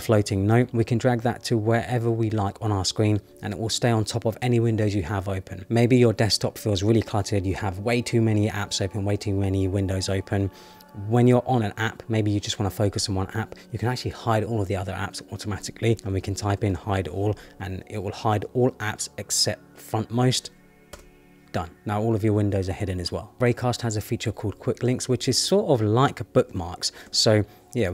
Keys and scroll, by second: 20.9 Return.